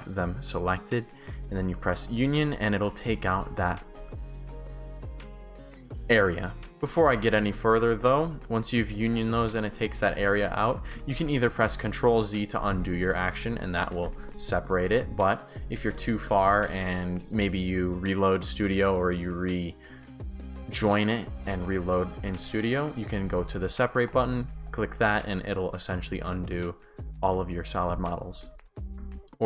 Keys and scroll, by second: 3.0-3.8 typing, 5.0 shift+a, 6.7 Pause, 9.5 shift+w, 10.4 shift+w, 11.5 ctrl+z, 13.1 shift+s, 15.4 ctrl+shift+z, 16.1 shift+w, 21.6 shift+s, 22.2 shift+w, 25.2 shift+s, 28.8 Pause.